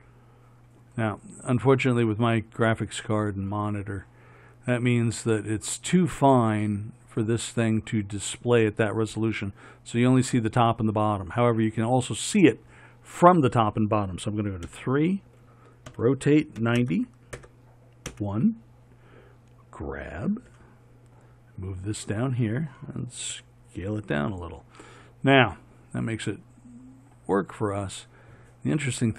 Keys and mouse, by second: 14.9 KP_3, 16.1 r, 20.7 g, 23.5 s.